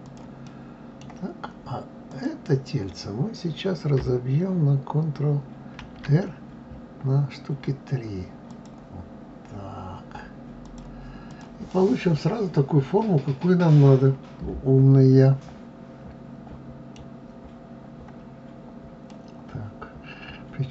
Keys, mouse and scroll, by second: 0.5-2.1 middle drag, 2.1 click, 5.8 ctrl+r, 11.3 click, 11.7-14.7 middle drag, 17.4-17.9 scroll down 2, 17.9-18.3 scroll up 1, 19.1-20.7 middle drag.